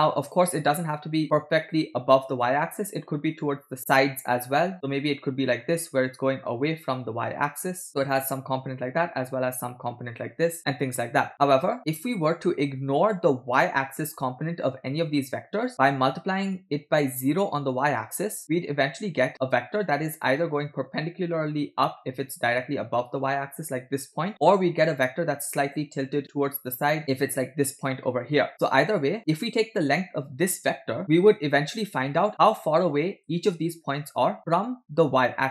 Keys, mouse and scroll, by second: 3.6 click, 4.7 click, 5.2 click, 5.9 click, 6.7 click, 6.8 click, 6.9 click, 7.2 click, 7.7 click, 8.8 click, 9.0 click, 9.2 click, 9.4 click, 10.2 click, 10.5 click, 19.0 click, 20.2-21.6 drag, 21.6 click, 21.9 click, 24.3 click, 26.1 click, 27.7 click, 32.3 click.